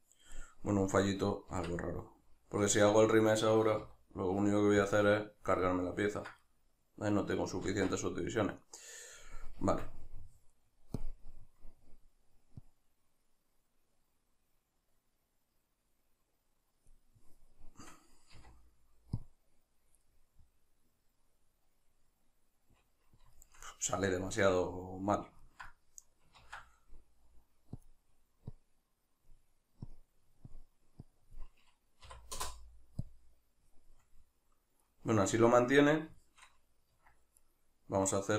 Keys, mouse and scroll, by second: 0.4 right click, 1.5 Tab, 5.6-11.0 ctrl+middle drag, 7.7 ctrl+z, 9.6 Tab, 11.0-20.0 drag, 20.0-27.8 middle drag, 26.4 ctrl+z, 27.8-34.0 drag, 34.0-37.4 middle drag, 36.9 Tab, 37.4 right click.